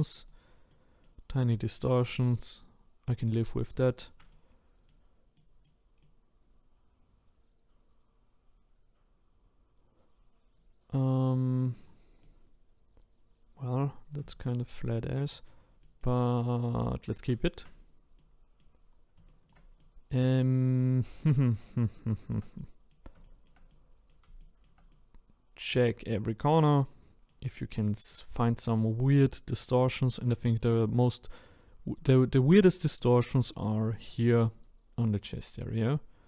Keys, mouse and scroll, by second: 0.2 click, 0.7 middle click, 1.6 click, 2.0 middle click, 2.6-3.0 scroll down 5, 3.1-10.0 middle drag, 11.8-12.2 scroll down 1, 12.2-14.8 middle drag, 14.8-15.3 scroll up 1, 15.3-17.8 middle drag, 17.8-18.2 scroll up 2, 18.2 middle click, 18.9-19.3 scroll down 1, 19.3-27.4 shift+middle drag, 27.4-28.1 scroll up 3, 28.1 middle click, 28.6-29.2 scroll down 2, 29.2-31.6 middle drag, 31.6 click, 32.1 shift+middle click, 32.8-33.6 scroll up 3, 33.6 shift+middle click, 34.4 click, 35.4-35.9 scroll up 3, 35.9-36.2 scroll down 1.